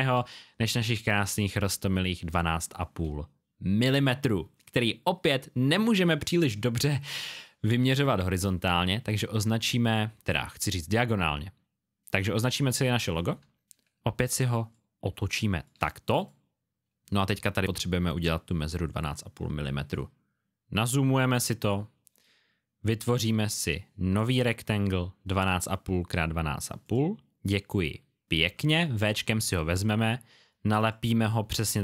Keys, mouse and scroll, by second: 0.3 click, 8.4 click, 14.7 shift+click, 16.1 click, 20.7-21.2 alt+scroll up 1, 23.0 click, 28.9 click.